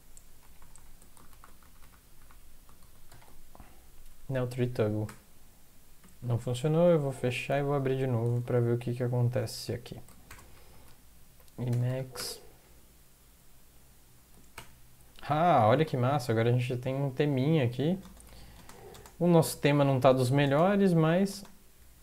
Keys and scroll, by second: 0.4 ctrl+Left, 1.3 ctrl+Left, 2.8 ctrl+Right, 3.1 ctrl+x, 5.1 ctrl+e, 6.0 ctrl+\, 7.4 ctrl+\, 8.4 alt+F4, 10.3 alt+Tab, 12.2 Up, 14.6 Return, 14.6 BackSpace, 16.6 Down, 17.3 Down, 17.5-18.0 Down, 18.8 Up, 18.9 Up, 19.9 space, 20.2 space, 20.8 space, 21.0 Down, 21.3 Down, 21.8 space.